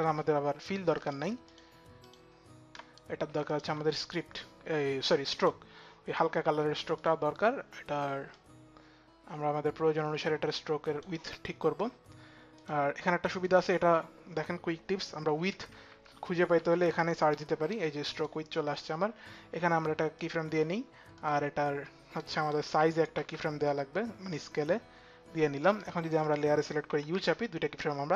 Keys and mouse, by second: 1.1 alt+click, 1.7 alt+click, 2.5 alt+click, 3.4 alt+click, 3.9 alt+click, 6.6 alt+click, 9.2 click, 10.3 click, 13.1 click, 15.1-18.3 typing, 17.8 click, 19.7-20.4 typing, 19.9 click, 20.8 click, 22.2 click, 22.2 shift+s, 24.0 click, 24.0 shift+s, 25.0 click, 25.0 shift+s, 26.4 click, 26.4 s, 27.1 click, 27.1 u.